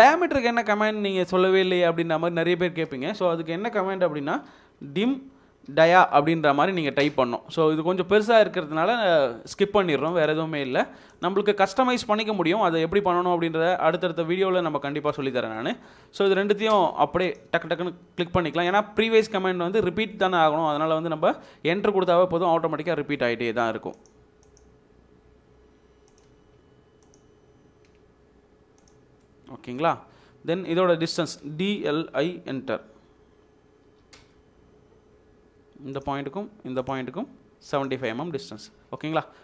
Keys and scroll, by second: 4.5-5.9 typing, 8.2 Return, 16.7 space, 23.4 space, 29.3 space, 30.5 space, 31.0 Escape, 32.2-34.5 typing, 38.0 Escape.